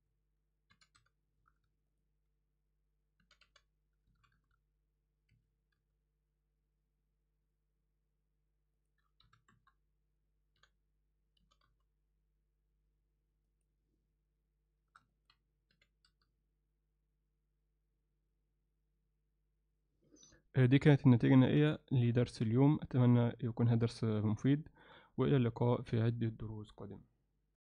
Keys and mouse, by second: 0.7 r, 3.2 r, 5.8 n, 8.8 click, 10.6 t, 15.1 ctrl+alt+click, 21.4 ctrl+click, 21.9 alt+shift+click, 22.7-23.9 drag, 23.9-24.5 alt+right drag, 24.7 shift+right click, 25.3-25.7 alt+right drag.